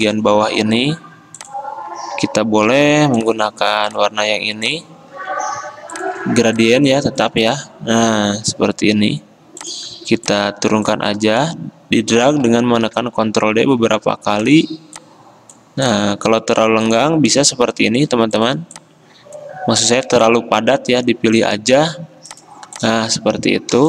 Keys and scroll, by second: 0.0 v, 2.9-3.8 typing, 13.1 ctrl+d, 13.3 ctrl+d, 13.4 ctrl+d, 13.6 ctrl+d.